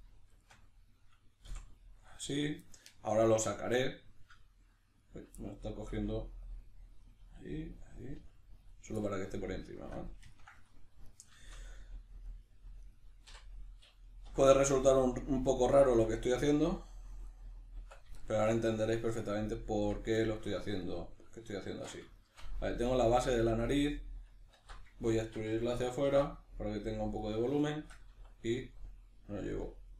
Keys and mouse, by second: 0.3 shift+right click, 1.5 f, 2.2-5.0 shift+middle drag, 5.0 right click, 5.4-6.6 middle drag, 5.9 g, 6.6 click, 7.0 right click, 7.2 g, 7.7 click, 8.0 right click, 8.1 g, 8.7 click, 9.0-11.0 middle drag, 11.0 right click, 11.4-12.8 shift+middle drag, 12.8 right click, 13.2 l, 17.3 right click, 17.8 Tab, 18.2-20.8 shift+middle drag, 19.7 Tab, 20.8 right click, 21.7 shift+Tab, 22.2-23.3 shift+middle drag, 23.3 right click, 24.6 alt+q, 25.1-27.3 shift+middle drag, 26.1 e, 27.3 click, 27.6-29.9 shift+middle drag, 28.1 e.